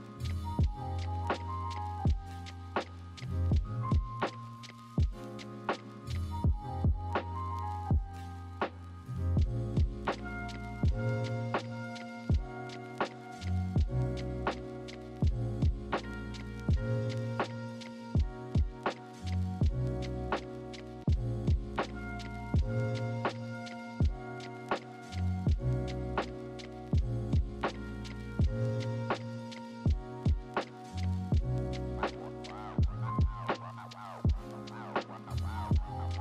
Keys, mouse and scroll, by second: 24.9 ctrl+z.